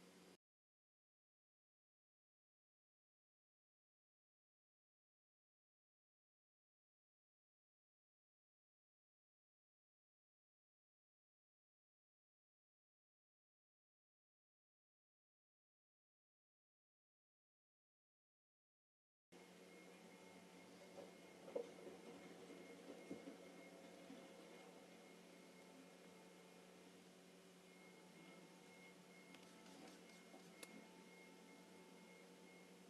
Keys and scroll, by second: 8.1 space, 29.4 space.